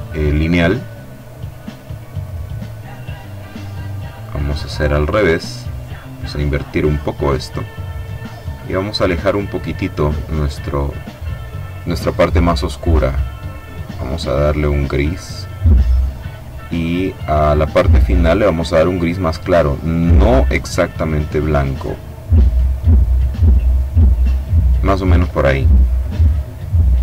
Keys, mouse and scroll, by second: 2.4 click, 3.6-4.9 drag, 5.1-7.6 drag, 8.4-10.3 drag, 10.5 click, 13.8-15.2 drag, 17.1 click, 18.9-23.2 drag.